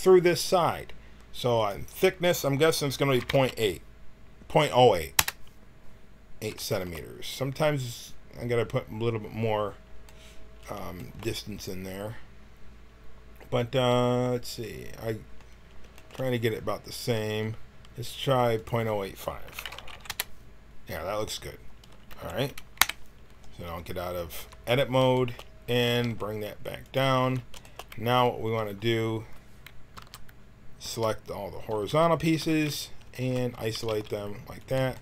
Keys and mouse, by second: 6.2 middle click, 7.4-9.8 middle drag, 11.3 middle click, 12.4 middle click, 13.5-15.1 middle drag, 22.0 t, 22.7 KP_1, 24.4 Tab, 25.8 g, 27.2 Tab, 28.4 a, 29.9 l, 30.8 l, 31.7 l, 32.2 l, 33.7 g.